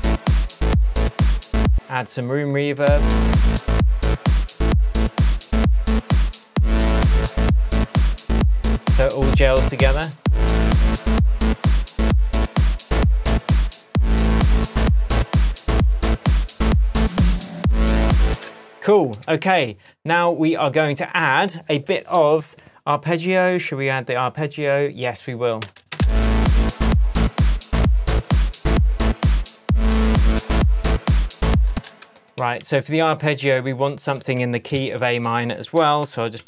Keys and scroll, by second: 1.6 space, 2.7 space, 18.3 space, 19.0 super+space, 19.1 super+s, 25.9 space, 31.6 space, 32.2 super+space, 32.3 super+s, 34.7 shift+super+t, 35.7 shift+super+r, 36.0 shift+super+r.